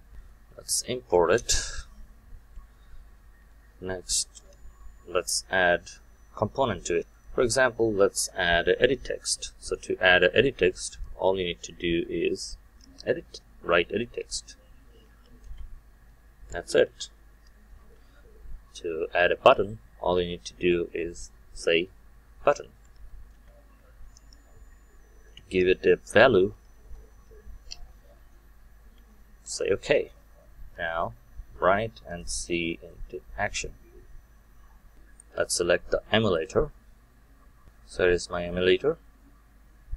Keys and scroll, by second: 1.4 alt+Return, 15.4 Return, 23.2 Return, 32.2 shift+F9.